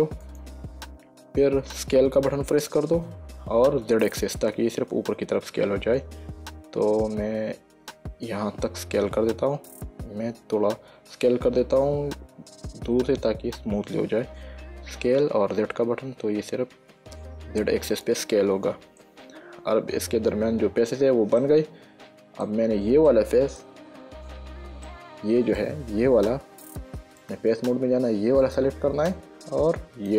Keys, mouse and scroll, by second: 0.6 click, 2.5 s, 4.4 z, 10.4 Escape, 11.6 s, 12.5 z, 18.4 click, 19.3 middle click, 21.7 middle click, 23.4 shift+middle click, 25.2 middle click, 27.5 click, 28.7 click.